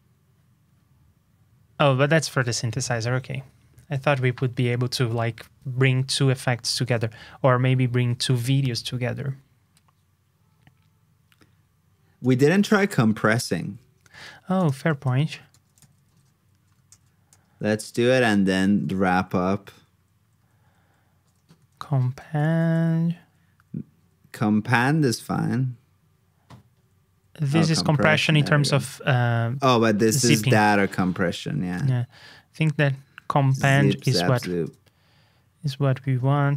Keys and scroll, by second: 6.8 super+Tab, 13.1 super+s, 14.1 super+Tab, 15.2 super+Up, 15.5 super+f, 16.8 super+g, 34.4 super+c, 34.6 super+Tab.